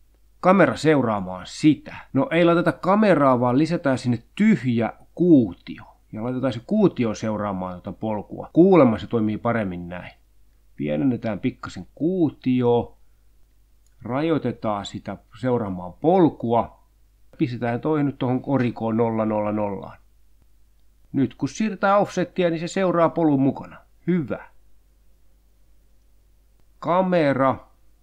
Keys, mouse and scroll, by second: 1.0 middle click, 1.0 Tab, 2.5 shift+a, 5.4 click, 6.3 s, 7.6 click, 10.2 click, 11.1 click, 12.0 click, 13.8 click, 14.8 click, 16.0 click, 16.6 0, 16.9 Return, 17.9 click, 18.2 0, 18.4 Return, 19.1 click, 19.4 0, 19.6 Return, 20.6-25.6 drag, 27.5 click.